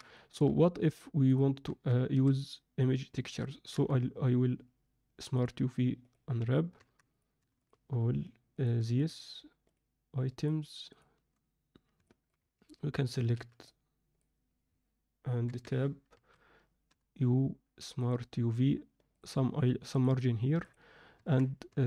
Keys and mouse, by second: 0.1 middle drag, 0.8 click, 1.2 click, 1.6 Tab, 2.0 a, 3.7 u, 6.7 Tab, 7.6 shift+click, 8.9 shift+drag, 10.4 shift+click, 12.0 middle click, 13.2 z, 13.2 b, 15.6 Tab, 16.1 a, 16.8 u, 21.1 Tab, 21.6 Tab.